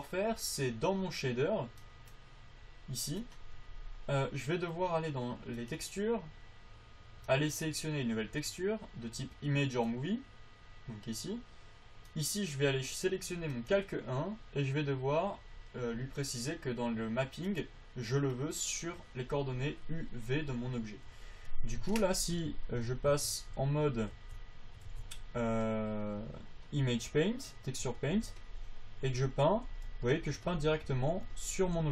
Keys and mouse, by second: 2.1-5.4 drag, 5.9-12.4 drag, 17.8-20.0 drag, 22.7 Tab, 23.1 Tab, 23.5 Tab, 24.0 alt+z, 24.5 alt+z, 25.2-27.3 alt+z, 28.0 alt+z, 29.9 f, 31.3 alt+z.